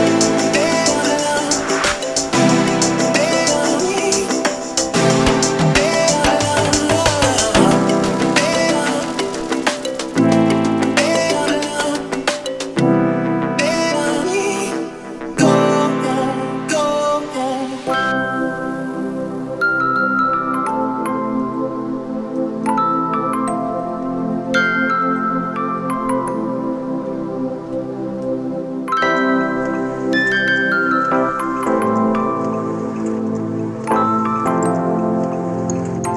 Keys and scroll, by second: 2.6 Escape, 3.4 Escape, 4.4-6.4 typing, 6.6 Return, 7.4 2, 8.0 2, 8.1 Return, 9.2 1, 9.3 Return, 10.1 Return, 10.5 Escape, 11.9 -, 23.6 Escape.